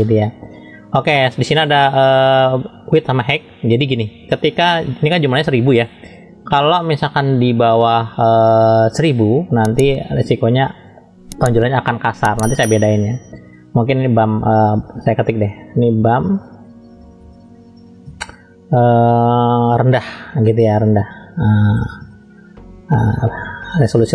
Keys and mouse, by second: 23.9 BackSpace.